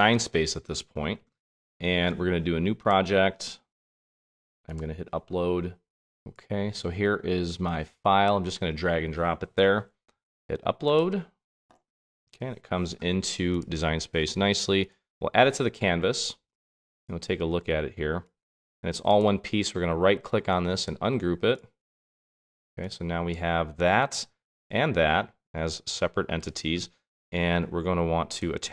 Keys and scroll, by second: 0.6 super+Tab, 1.8 super+Tab, 2.6 super+Tab, 3.6 super+Tab.